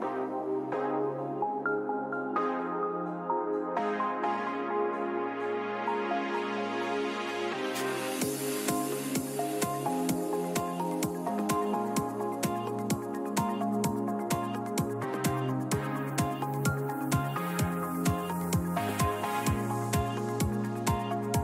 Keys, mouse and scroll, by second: 0.0 a, 0.6-2.4 right drag, 2.7 a, 3.3 middle click, 4.4 right click, 4.8-6.7 middle drag, 5.3 click, 6.9-8.7 drag, 8.1 middle click, 9.1 a, 14.0 k.